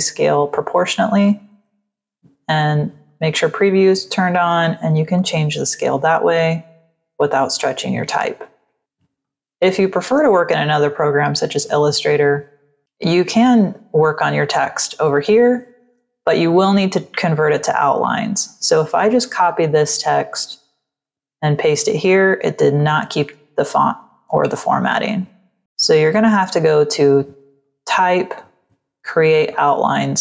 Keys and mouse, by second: 1.1 click, 2.4 click, 3.0 click, 4.1 click, 5.0 shift+Up, 6.3 shift+Up, 6.9 shift+Down, 7.6 shift+Down, 9.1 click, 12.7 click, 20.2 click, 20.8 ctrl+v, 22.2 v, 22.7 click, 23.5 z, 24.0 click, 24.6 v, 27.5 click, 29.4 click.